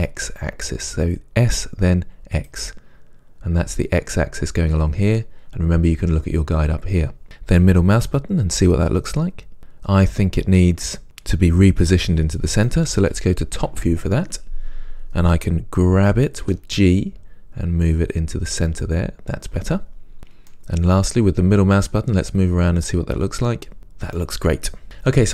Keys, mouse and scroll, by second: 2.6 click, 7.8-12.6 middle drag, 13.8 KP_7, 16.6 g, 20.7 middle click, 22.8-25.3 middle drag.